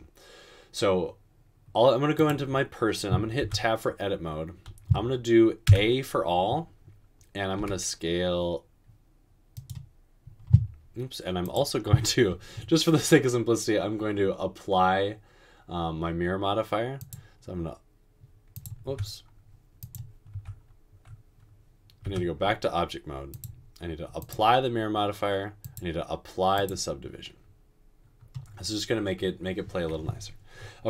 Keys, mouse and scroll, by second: 3.5 Tab, 5.7 typing, 7.6 typing, 18.9 Tab, 19.8 click, 20.3 Tab, 22.0 Tab.